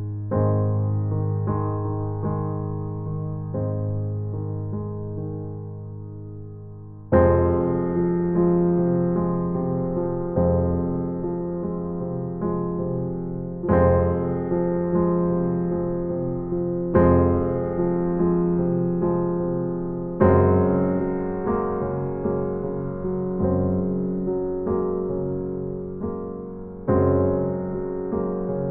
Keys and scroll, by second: 23.1 space.